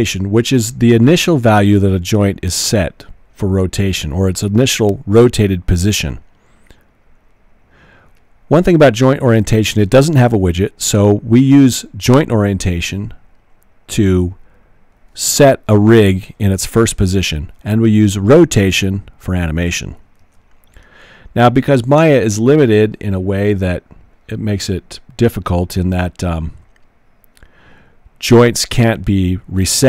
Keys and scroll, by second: 20.2 super+z.